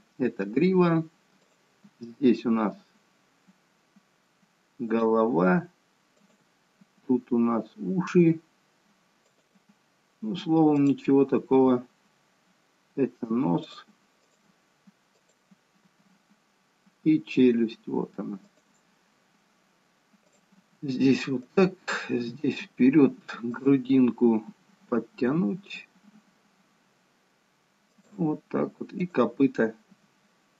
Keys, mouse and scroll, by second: 1.6 click, 2.1 g, 6.3 click, 7.1 g, 10.9 click, 11.6 g, 14.4 click, 15.4 click, 16.1 g, 20.3 click, 20.8 g, 23.6 click, 24.8 g, 29.2 click, 30.1 g.